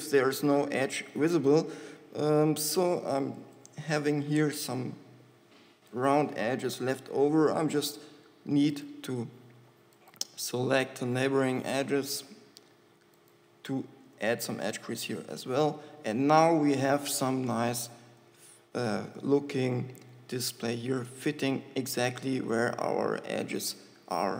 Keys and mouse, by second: 6.2-8.0 middle drag, 11.0 shift+middle click, 14.5 shift+e, 18.2 Tab, 23.0 Tab, 23.9 Tab.